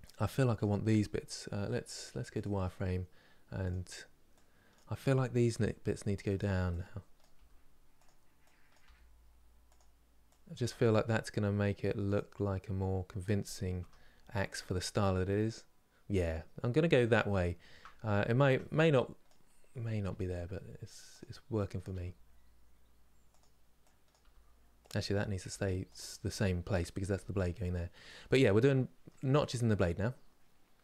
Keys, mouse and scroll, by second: 0.3 click, 2.0 click, 3.3 click, 5.2 g, 6.9 click, 7.1 g, 8.4 click, 8.6 g, 10.3 click, 10.4 g, 13.8 scroll down 3, 15.6 scroll up 3, 17.1 shift+middle click, 17.6-18.1 scroll up 2, 18.1 Tab, 18.9 click, 19.8 g, 21.5 click, 21.6 g, 23.8 click, 23.9 g, 25.1 click, 25.2 g, 27.7-29.0 middle drag, 29.0-29.4 scroll down 1, 29.4-30.8 middle drag.